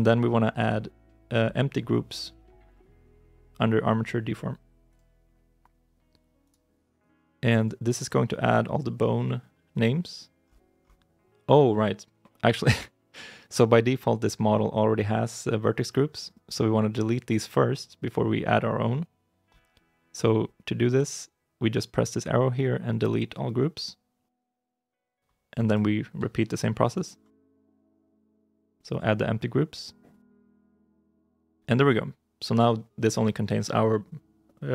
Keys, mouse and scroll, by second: 6.3 right click, 10.3-12.8 scroll up 1, 26.7 shift+right click, 27.7 ctrl+p, 30.5 right click.